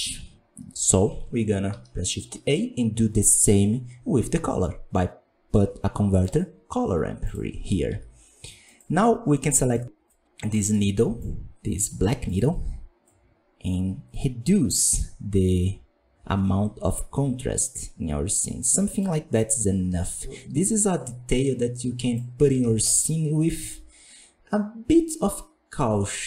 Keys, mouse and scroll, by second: 9.8-13.0 drag, 22.1 click, 22.8 ctrl+shift+click.